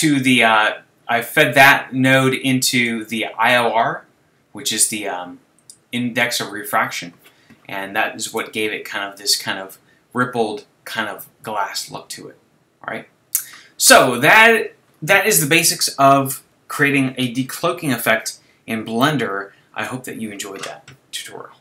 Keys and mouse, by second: 19.0-21.6 middle drag.